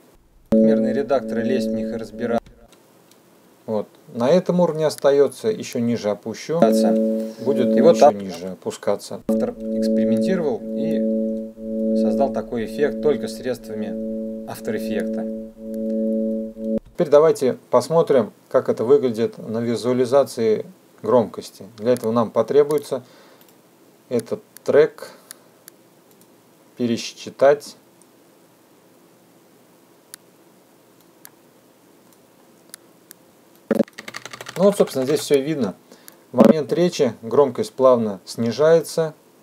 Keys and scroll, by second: 5.8 space, 15.2 space, 34.6 =.